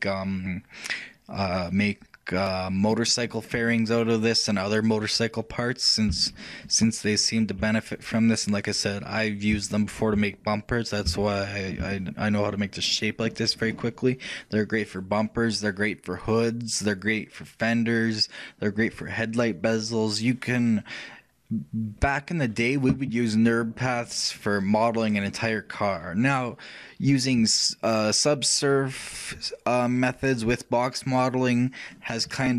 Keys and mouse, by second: 4.1-9.7 middle drag, 14.2-32.5 shift+middle drag.